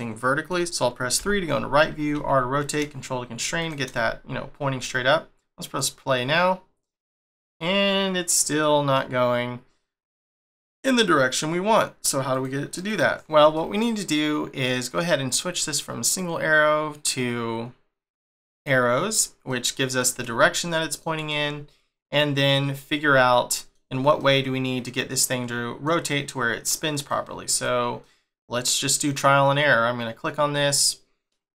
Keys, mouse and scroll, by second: 1.1 3, 3.9 middle click, 5.6 click, 7.5 middle click, 12.3 click, 12.7 click, 13.5 middle click, 16.0 click, 19.4 middle click, 22.6-23.1 scroll up 2, 23.1 shift+middle click, 26.9 click, 27.4 click, 27.9 middle click.